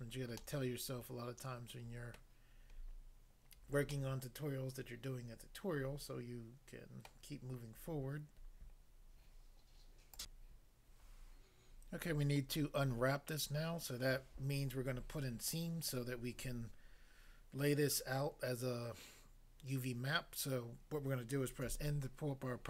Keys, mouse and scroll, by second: 0.4 middle click, 2.2 middle click, 2.7 scroll up 1, 3.9 middle click, 7.1 middle click, 10.2 click, 10.4 click, 21.6 n.